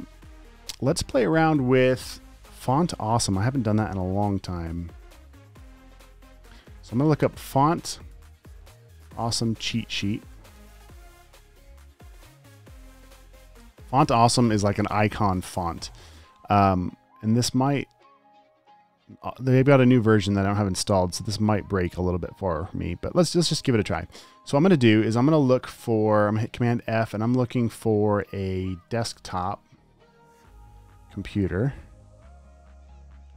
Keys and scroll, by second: 6.0 super+t, 6.2-10.3 typing, 7.8 super+a, 10.7 Right, 10.9 Return, 26.8 super+f, 28.8-30.2 typing.